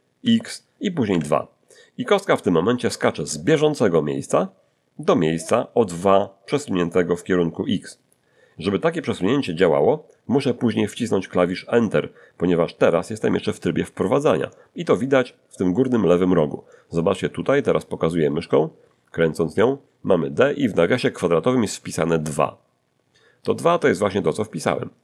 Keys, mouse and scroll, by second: 0.2 x, 1.1 2.